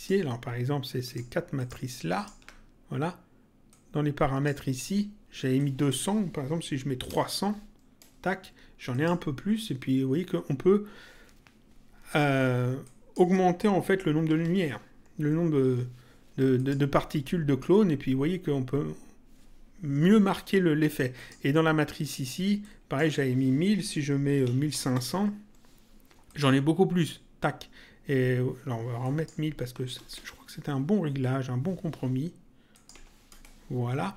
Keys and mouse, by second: 1.0 ctrl+click, 3.6 click, 5.5 click, 8.0 Return, 8.8 click, 12.8 click, 15.2 Return, 16.5 click, 21.1 click, 22.5 click, 25.3 Return, 26.2 click, 29.0 click, 30.1 Return, 32.7 click, 33.2 Return.